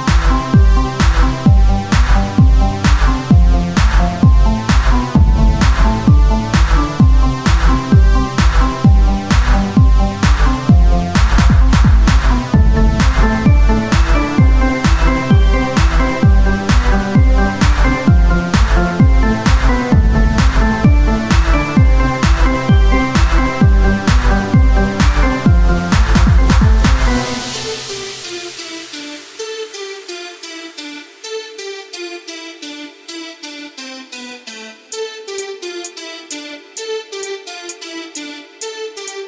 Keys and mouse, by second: 16.1 Tab, 16.1-17.7 drag, 16.2 Tab, 17.7 s, 19.1-21.1 drag, 21.1 Tab, 24.3 Tab, 25.0-27.2 right drag, 27.8 Tab, 30.9 Tab, 31.5-34.2 drag, 34.3 Tab, 38.3 Tab.